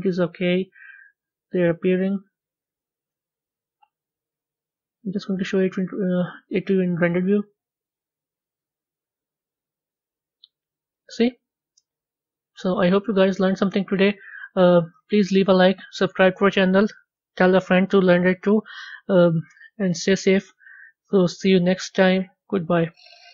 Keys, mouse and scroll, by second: 4.9 click, 6.3 a, 8.5 z, 11.0-13.9 middle drag, 15.5-23.3 middle drag.